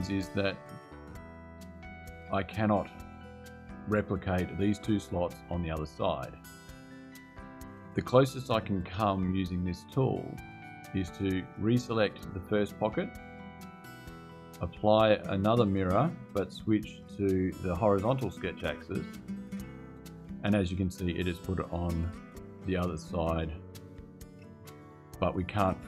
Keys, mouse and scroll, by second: 12.1 click, 14.5 click, 16.1 click, 17.6 click, 19.7 click.